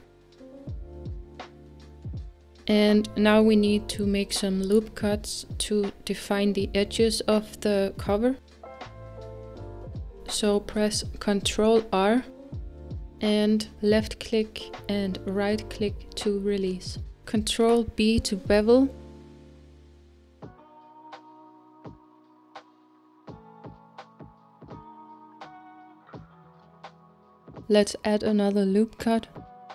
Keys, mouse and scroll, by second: 0.8-2.4 drag, 2.4-2.8 scroll down 2, 2.8-6.6 middle drag, 6.6 Tab, 7.3-14.4 middle drag, 14.4 ctrl+r, 15.1 ctrl+r, 25.1-29.7 middle drag.